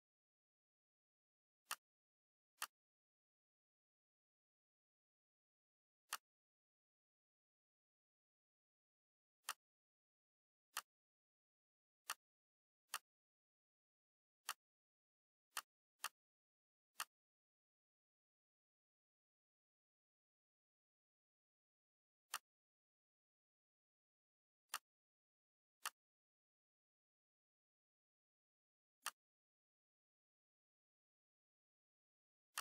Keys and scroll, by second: 4.6 ctrl+shift+c, 7.5 ctrl+shift+v.